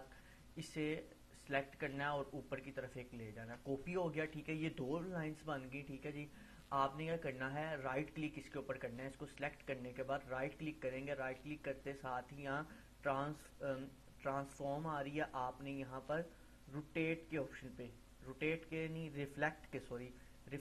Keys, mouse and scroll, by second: 2.4-3.3 alt+drag, 6.7 click, 7.3 right click, 9.0 click, 9.8 click.